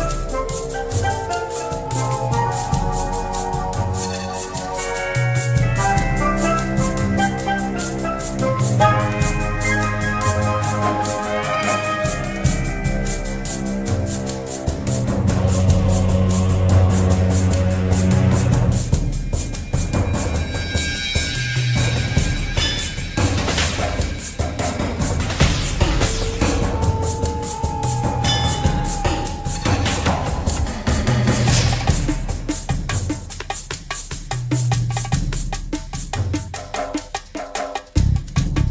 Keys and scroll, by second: 0.0-0.4 typing, 2.3-3.3 typing, 4.2 ctrl+a, 20.2 ctrl+KP_1, 31.5 ctrl+KP_1, 32.7 ctrl+KP_1, 36.3 ctrl+KP_1.